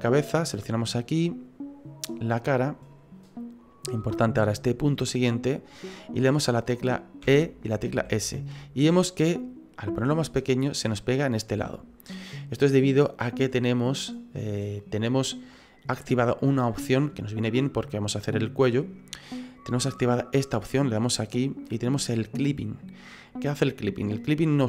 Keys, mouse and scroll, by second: 0.1 right click, 0.7 middle click, 7.2 e, 20.3 click.